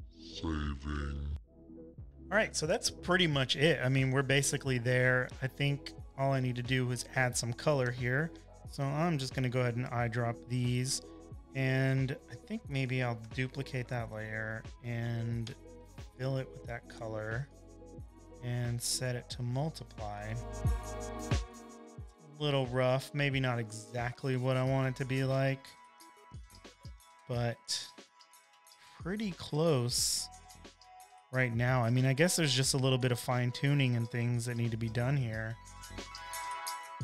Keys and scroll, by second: 1.3 space, 7.1 v, 8.3-10.7 typing, 12.2 typing, 15.6 super+j, 17.8 alt+shift+BackSpace, 26.2 z, 27.2-28.4 typing, 30.1-30.9 typing.